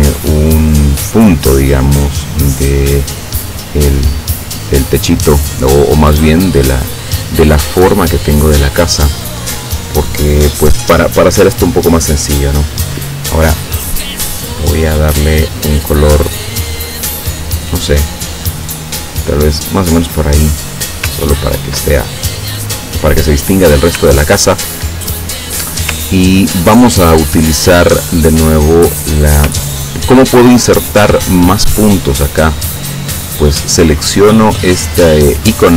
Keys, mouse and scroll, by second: 2.3 click, 6.6 click, 8.3 click, 14.3 click, 17.1-19.1 drag, 19.5 click, 21.2 ctrl+scroll down 2, 24.3 ctrl+scroll up 2, 26.1 ctrl+middle click, 26.1-26.6 ctrl+scroll down 1, 26.6 ctrl+click, 26.9 ctrl+scroll up 1, 29.7 ctrl+scroll up 1.